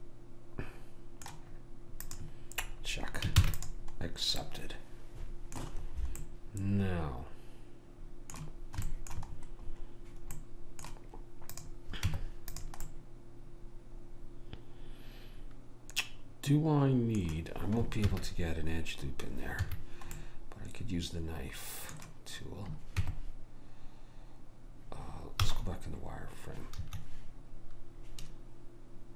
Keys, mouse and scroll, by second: 2.1 click, 3.4 ctrl+s, 6.8-8.0 middle drag, 8.9-12.1 middle drag, 11.6 click, 12.1 Tab, 12.9 middle click, 18.1 ctrl+r, 20.2-23.0 middle drag, 23.0 Tab.